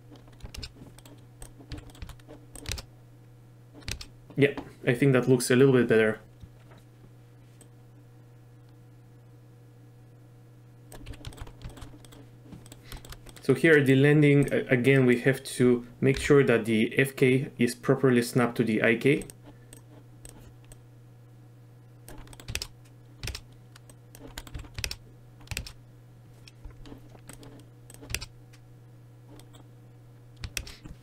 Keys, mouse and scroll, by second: 0.6 shift+space, 1.0 click, 1.7 z, 1.9 click, 2.7 shift+space, 4.0 shift+space, 7.6-10.9 drag, 11.1 z, 11.3 shift+middle click, 11.7 shift+middle click, 12.1 middle drag, 12.7 middle click, 13.3 middle click, 13.8 middle click, 14.5 click, 15.0 middle click, 16.2 n, 19.3 click, 20.3 click, 20.8-22.1 drag, 22.4 middle click, 22.6 shift+space, 23.3 shift+space, 23.9 click, 24.4 click, 24.6 z, 24.9 shift+space, 25.6 shift+space, 28.2 shift+space, 29.4 drag, 30.6 shift+space.